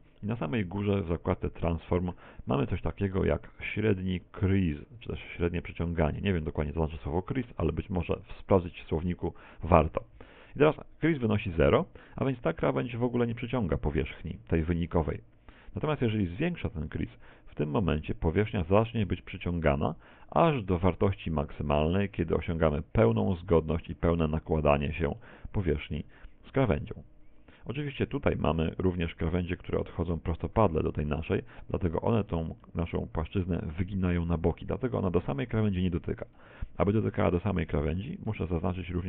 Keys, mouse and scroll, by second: 14.8 middle click, 17.5 click, 24.6-24.9 scroll up 5, 25.3 middle click, 32.7 middle click, 36.3 scroll down 2, 36.7 shift+middle click, 38.6 shift+right click, 38.9 shift+right click.